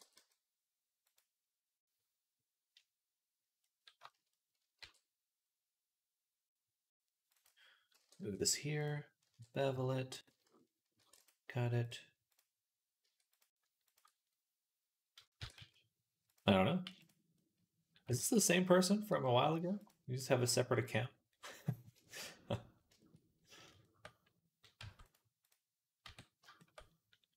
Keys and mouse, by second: 4.6 ctrl+r, 7.8 g, 9.1 ctrl+b, 10.8 ctrl+r, 15.2 e, 16.7 m, 18.0 ctrl+z, 18.9 m, 20.3-22.4 middle drag, 22.4 click, 22.5 middle click, 22.7-27.3 shift+drag, 24.6 Tab, 25.9 Tab.